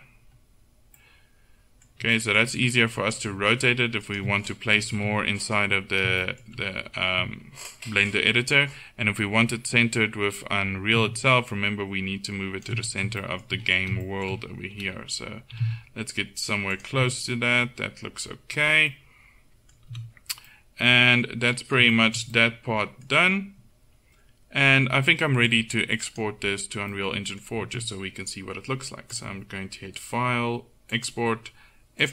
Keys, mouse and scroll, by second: 3.3 r, 5.0 KP_1, 11.3 click, 15.6 g, 20.0 a, 21.6-23.4 middle drag, 25.6 click, 26.2-27.3 drag.